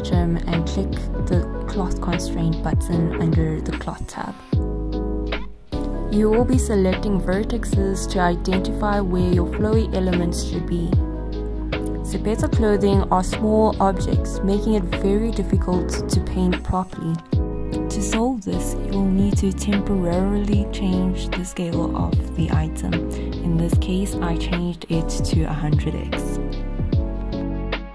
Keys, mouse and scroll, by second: 0.5-0.9 scroll up 1, 0.9 click, 1.2 scroll up 1, 1.7-4.0 alt+middle drag, 4.0 click, 5.2-5.6 scroll down 1, 5.9-7.6 alt+drag, 7.6-8.2 scroll up 1, 8.3 click, 11.0 scroll down 1, 11.2 click, 11.7-12.1 scroll down 1, 16.2 click, 20.3 typing, 21.4 click, 22.1-22.5 typing, 23.2 click, 23.8-24.6 typing, 24.9 Return, 25.9 click.